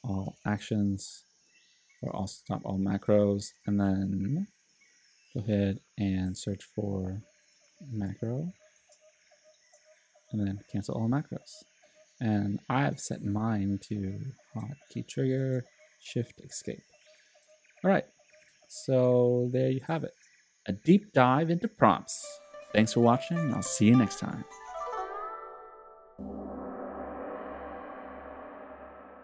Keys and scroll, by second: 0.0-0.5 typing, 2.1-3.9 typing, 7.9-9.3 typing.